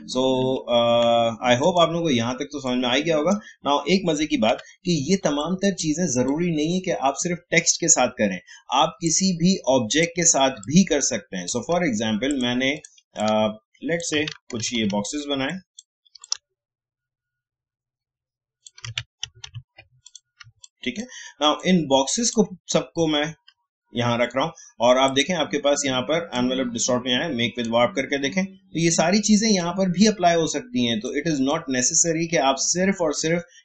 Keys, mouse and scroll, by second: 1.6-4.5 drag, 4.5 Delete, 5.3 click, 9.0-14.6 drag, 14.6 ctrl+d, 15.5 click, 16.2-19.2 drag, 19.2 ctrl+d, 20.0 click, 20.4 space, 20.6 click, 20.9 space, 21.5-23.1 drag, 23.1-23.5 scroll down 2, 25.0 click, 25.1-33.6 drag.